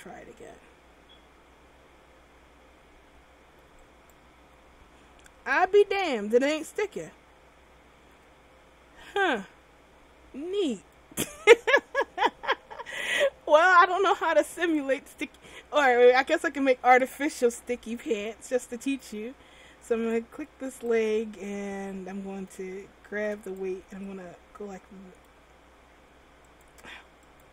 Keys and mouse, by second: 4.6 r, 17.7 r, 18.8-20.2 middle drag, 23.2 middle click, 23.4-26.7 drag.